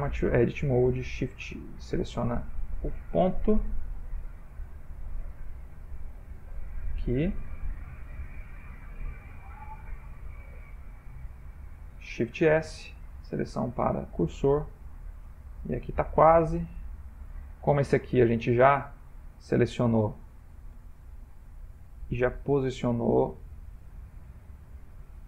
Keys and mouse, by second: 1.9 f, 3.6 click, 4.4 click, 5.1 g, 6.1 click, 7.0 g, 8.7 ctrl+z, 9.3 ctrl+z, 10.0 click, 10.7 g, 12.6 shift+s, 14.3 shift+middle click, 14.4 shift+middle click, 14.5 shift+middle click, 14.9 middle click, 16.0 shift+middle click, 16.7 ctrl+middle click, 17.8 middle click, 18.0 middle click, 18.7 click, 19.9 click, 20.7 g, 23.2 middle click, 24.2 middle click.